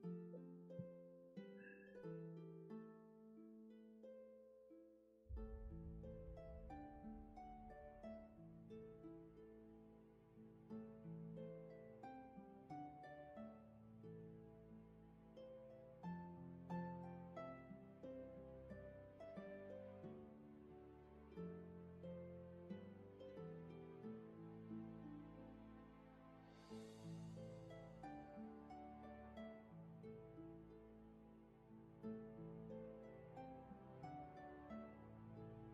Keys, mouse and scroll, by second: 15.2 ctrl+z, 26.2 ctrl+z, 32.9 ctrl+z, 35.5 ctrl+z.